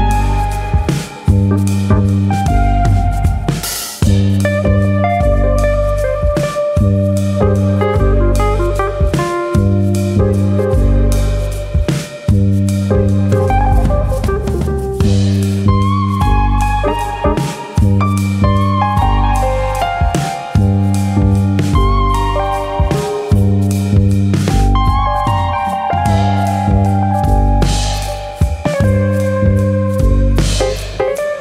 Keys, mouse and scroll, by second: 0.1 ctrl+KP_Add, 1.3 click, 2.6 e, 3.0 click, 3.4 click, 4.6 r, 5.2 click, 5.6 click, 7.0 e, 7.8 click, 8.1 click, 9.1 r, 9.8 click, 10.2 click, 14.0 e, 15.1 click, 15.4 click, 16.5 r, 17.5 click, 18.2 alt+click, 19.0 r, 19.7 click, 20.4 alt+click, 20.9 click, 22.4 alt+click, 23.3 ctrl+b, 27.0 right click, 27.7 click, 29.6 click.